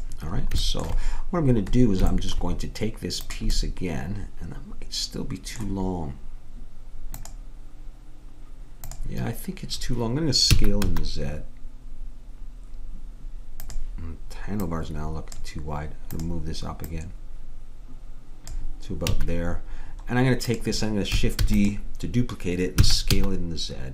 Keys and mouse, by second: 0.6-4.5 middle drag, 3.3-4.5 drag, 10.6 s, 14.6-18.7 drag, 19.1 a, 20.5-22.3 drag, 21.4 shift+d, 22.9 s.